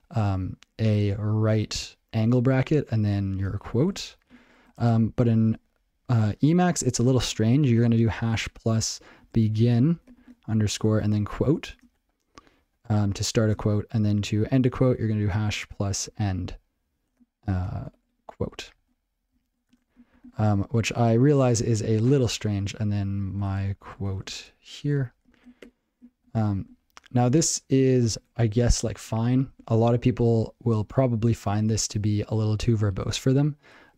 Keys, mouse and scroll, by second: 3.4-4.4 typing, 9.0-11.7 typing, 10.9 Tab, 15.8-17.8 typing, 18.0 Tab, 18.7 Tab, 19.3 ctrl+p, 19.7 Return, 23.4-24.7 typing.